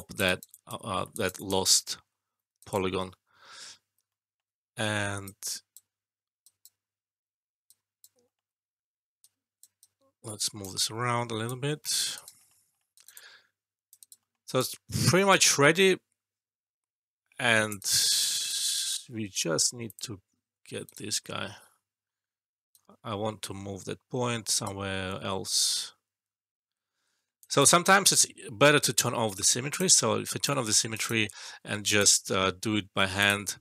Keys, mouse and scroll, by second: 0.2 alt+right click, 0.9 alt+middle click, 1.1 alt+right click, 1.3 alt+click, 2.6 alt+right click, 2.8 alt+middle click, 4.0 alt+middle click, 5.2-5.8 right drag, 8.2 alt+middle click, 9.1-10.7 right drag, 12.3 alt+middle click, 12.9 alt+right click, 13.1-17.8 alt+click, 13.9 alt+right click, 14.1 alt+middle click, 14.4 alt+right click, 14.6-17.8 alt+drag, 17.8 alt+right click, 18.0 alt+click, 18.3 alt+right click, 19.8 click, 20.8 right click, 21.4 ctrl+z, 22.7-24.9 right drag, 27.1 alt+middle click, 27.4 alt+click, 28.9 shift+s, 29.6 click, 30.2 alt+click, 30.9 alt+right click, 31.2 alt+middle click, 31.8 right click, 32.3 alt+middle click, 33.1 click.